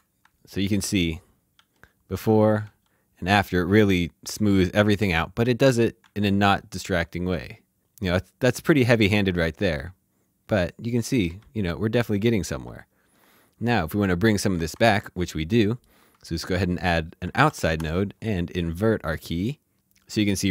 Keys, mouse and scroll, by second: 1.5 ctrl+d, 2.6 ctrl+d, 3.9 typing, 7.0-8.2 typing, 9.3 ctrl+Num_Lock, 9.7 typing, 12.1-12.6 typing, 14.3 alt+shift+Num_Lock, 14.3 typing, 15.2 shift+middle click, 17.3 typing.